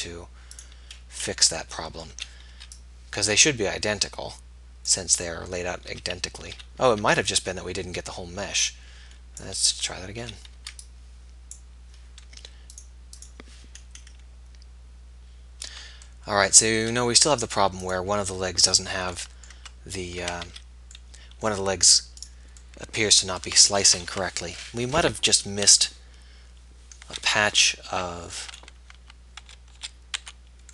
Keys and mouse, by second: 1.3 click, 1.9 middle click, 2.3 a, 2.7 b, 6.0 z, 7.0 a, 7.2 b, 11.0 b, 12.9-18.7 drag, 19.7 Tab, 20.3 Tab, 20.5 z, 23.7 Tab, 24.3 Tab, 29.5 z, 29.9 z, 30.3 a.